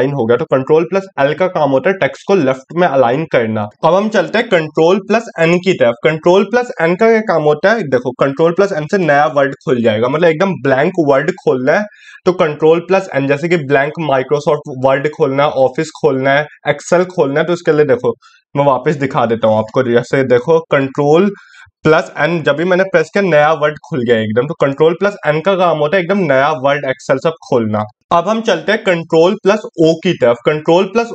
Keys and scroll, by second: 4.2 ctrl+n, 28.5 ctrl+o.